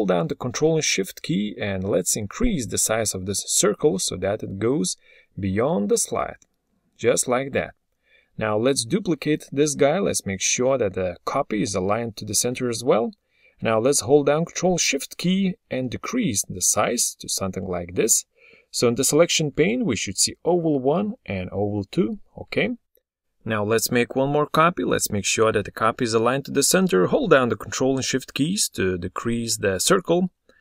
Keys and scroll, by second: 7.6 ctrl+d, 30.4 ctrl+d.